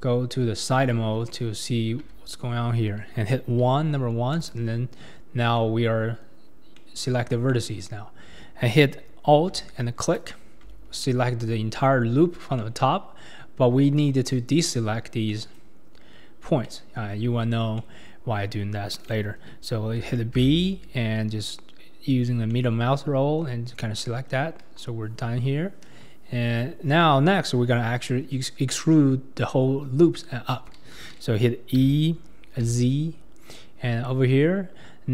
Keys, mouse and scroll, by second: 0.1-0.7 scroll up 4, 1.0 Tab, 1.5-2.0 scroll up 2, 2.0 Tab, 3.6 1, 4.4 click, 5.4 scroll up 1, 5.6 middle click, 6.4 scroll down 2, 6.7-10.0 middle drag, 10.0 alt+click, 10.8-12.0 scroll down 2, 11.0 middle click, 12.0-12.6 scroll down 1, 12.6-20.5 middle drag, 20.5 b, 24.0 middle click, 24.6 KP_1, 25.8 ctrl+KP_3, 31.8 e.